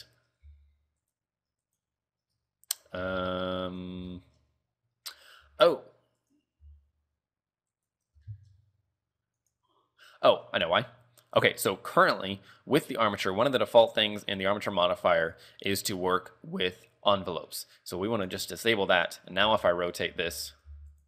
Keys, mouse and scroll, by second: 0.3 scroll down 4, 0.7 r, 1.8 right click, 3.0 ctrl+Tab, 3.3 scroll up 3, 4.2 shift+middle click, 5.3 r, 6.8 r, 8.4 shift+middle click, 9.5 click, 12.2 click, 14.5 right click, 15.8 click, 18.3 click, 19.0 right click, 19.7 r, 20.4 ctrl+Tab, 20.8 r.